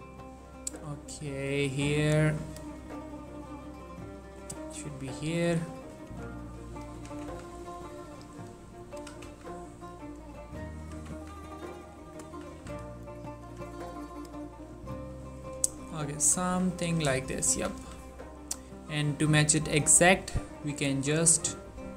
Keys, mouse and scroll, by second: 0.0-0.4 scroll down 2, 0.4-1.0 scroll up 2, 1.3 click, 1.4 g, 1.8-2.9 drag, 2.9 g, 3.3-4.1 scroll up 2, 4.1 scroll up 1, 4.3 click, 4.7 middle click, 5.3 scroll down 2, 5.6 3, 6.2 shift+middle click, 6.3-6.7 shift+scroll up 2, 6.7 click, 7.1 g, 7.4 z, 7.5-8.3 scroll up 2, 8.3 click, 9.1 g, 9.4 z, 9.5-9.9 scroll up 1, 9.9 click, 10.9 g, 11.3 z, 11.9 click, 12.4 z, 13.1 click, 13.6 g, 14.3 click, 14.6 scroll down 2, 14.9 ctrl+middle click, 15.5 shift+middle click, 16.1-17.4 ctrl+middle drag, 17.4 click, 17.7 g, 17.9 y, 18.1-19.1 scroll down 2, 19.1-19.7 scroll down 1, 19.7-20.8 scroll down 1, 20.8-21.9 scroll down 1.